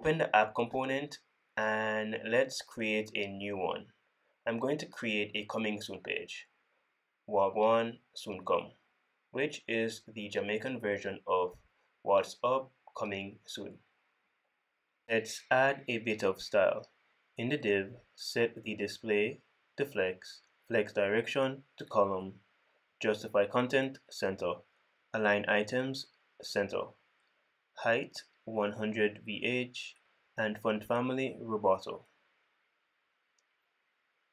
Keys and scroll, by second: 1.1 super+p, 2.7 super+a, 10.8 super+Right, 14.3 super+s, 19.4 super+Right, 22.3 super+Right, 24.8 super+Right, 28.1 super+Right, 29.9 super+Right, 32.1 super+s, 33.5 super+s.